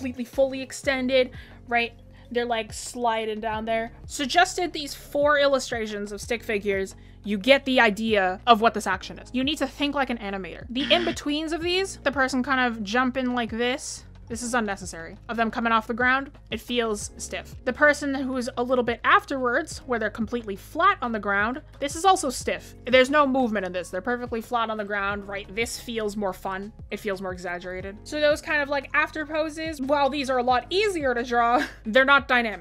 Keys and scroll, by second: 17.0 ctrl+z, 27.2 ctrl+z, 31.5 ctrl+z.